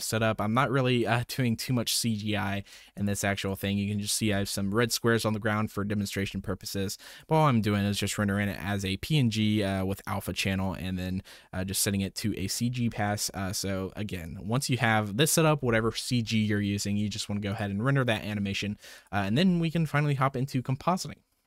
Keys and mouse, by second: 0.1 m, 0.5 click, 2.6 click, 3.0 ctrl+shift+click, 7.0 click, 13.0 middle click, 14.2-14.8 drag, 17.5-18.2 drag, 18.9 click.